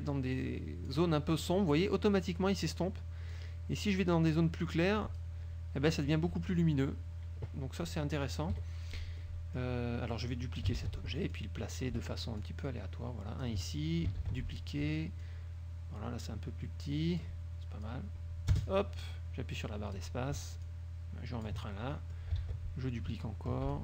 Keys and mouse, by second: 3.4-5.5 drag, 8.7 KP_Subtract, 9.3-9.9 drag, 10.9 ctrl+d, 11.5-12.1 ctrl+drag, 12.5-13.8 ctrl+drag, 14.3 ctrl+d, 15.3-17.5 ctrl+drag, 18.0-20.3 drag, 18.7 space, 20.8-21.8 ctrl+drag, 22.2 click.